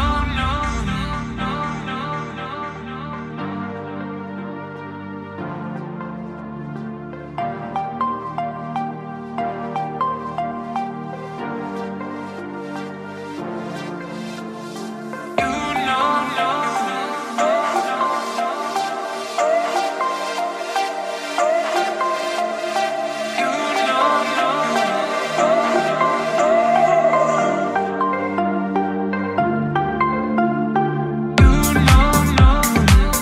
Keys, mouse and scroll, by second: 0.0 click, 0.9 click, 1.6 click, 2.8 click, 3.4 click, 4.2 click, 5.6 click, 6.3 click, 6.9 click, 7.5 click, 8.1 click, 9.3 click, 11.1 click, 12.2 click, 12.9 click, 13.5 click, 14.3 click, 14.9 click, 15.6 click, 16.4 click, 19.1 click, 20.0 click, 22.0 click, 22.8 click, 23.4-25.8 drag, 26.0 click, 28.3 click, 28.9 click, 30.3 click, 31.4 click, 32.3-33.2 drag.